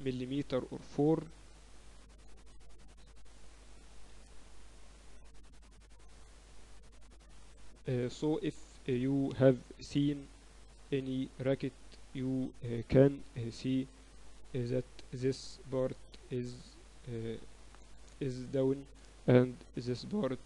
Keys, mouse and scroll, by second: 2.3 KP_8, 2.7 KP_6, 2.9 z, 3.5 z, 8.5 KP_1, 8.9 z, 9.9 a, 10.9 b, 13.6 a, 14.3 b, 15.9 middle click, 16.6-18.4 drag, 19.0-20.4 middle drag, 19.9 a.